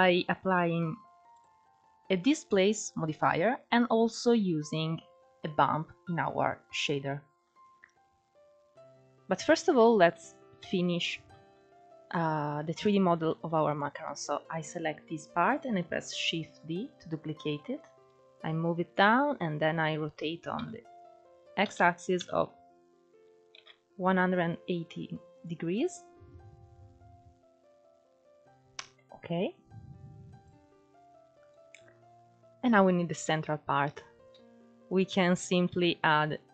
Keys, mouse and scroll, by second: 1.0-4.2 drag, 6.4-8.6 middle drag, 8.6-9.4 scroll down 1, 9.4-10.3 middle drag, 10.3 KP_1, 11.0 shift+middle click, 11.3-11.7 scroll up 2, 11.7-12.2 drag, 12.2 scroll down 1, 12.5-12.9 drag, 12.9-13.4 shift+middle drag, 13.4 click, 13.8-15.3 scroll down 1, 16.0 shift+d, 17.4-18.6 drag, 18.9 scroll down 2, 19.0-20.2 middle drag, 20.2 r, 25.0-28.1 drag, 28.4-30.1 typing, 34.6 click, 35.4 shift+a.